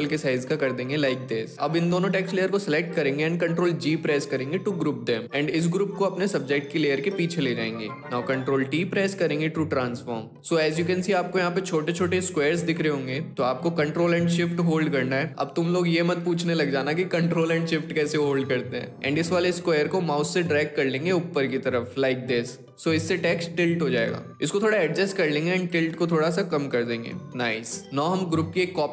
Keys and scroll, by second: 3.2 ctrl+g, 8.6 ctrl+t.